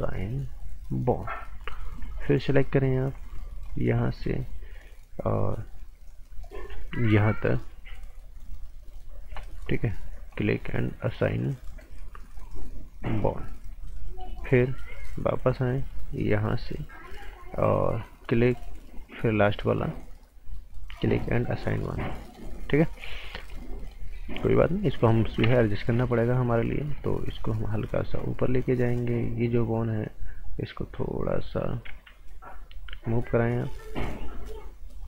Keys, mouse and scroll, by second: 1.4 right click, 2.1 alt+right click, 3.6 click, 4.0 right click, 6.7 right click, 13.7 right click, 14.6 alt+right click, 15.9 click, 22.2 right click, 24.7 scroll up 1, 24.9 right click, 25.4 t, 25.6 scroll up 1, 25.8 right click, 27.3 click, 31.8 ctrl+z, 33.2 click.